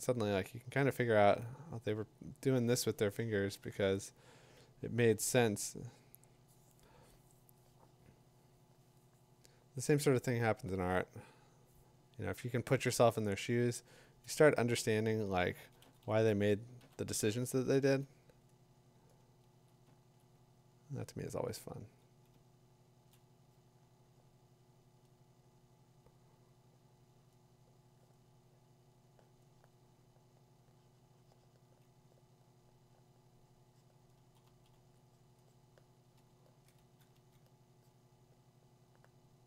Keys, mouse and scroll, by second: 13.9 click, 14.8-17.3 drag, 15.0-18.0 typing, 19.6-22.8 drag, 20.9 ], 22.8 2, 22.9 3, 23.0 7, 23.5 [, 34.2 ], 34.4 ], 36.2 ], 36.2 [, 36.8 [, 37.8 [.